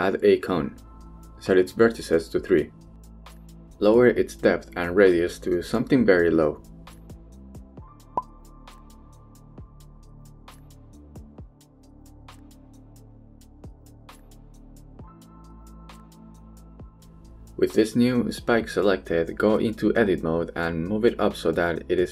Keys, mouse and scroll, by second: 0.8-1.1 middle drag, 1.4 shift+middle click, 2.3 click, 3.6 middle click, 4.8-5.9 drag, 6.4-8.9 drag, 9.9-10.2 shift+middle drag, 10.3 KP_1, 10.7 shift+middle click, 12.3-13.6 drag, 14.5-15.5 drag, 16.5-17.9 drag, 18.7 Tab, 19.1 a, 19.4 g, 19.6 z.